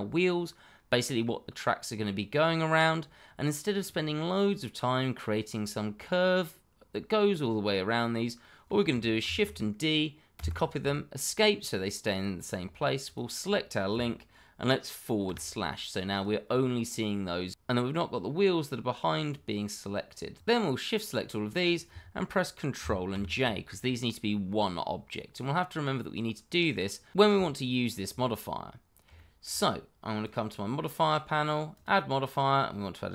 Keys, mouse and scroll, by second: 0.9 middle click, 8.4 middle click, 9.2 shift+d, 10.3 Escape, 13.0 shift+click, 13.1 click, 15.2 /, 16.1 click, 16.4-17.8 scroll up 1, 20.4 click, 23.1 ctrl+j, 25.4 middle click, 29.1 shift+middle click, 29.2 middle click, 29.3 shift+middle click, 32.9 click.